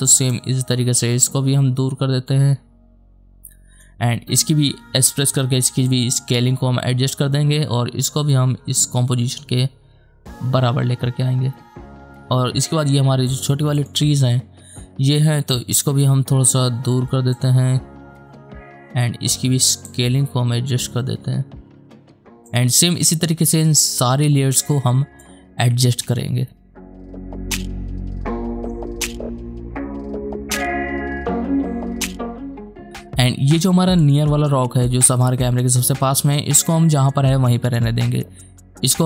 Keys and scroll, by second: 5.0 s, 27.1 ctrl+z, 27.8 s, 29.3 s, 30.6 space, 31.2 h, 32.3 s.